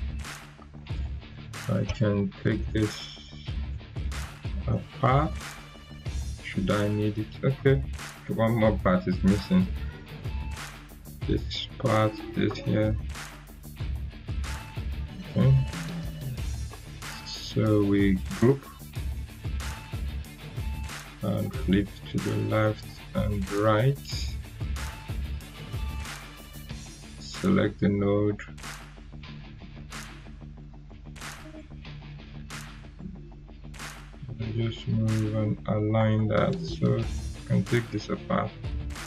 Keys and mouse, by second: 2.0 Delete, 2.7-3.3 drag, 3.9 ctrl+g, 4.6-5.6 drag, 7.5 ctrl+z, 8.1 click, 14.0 shift+click, 14.9-15.8 drag, 18.2 ctrl+g, 21.4-30.4 drag, 30.8 ctrl+z, 31.4-35.4 drag.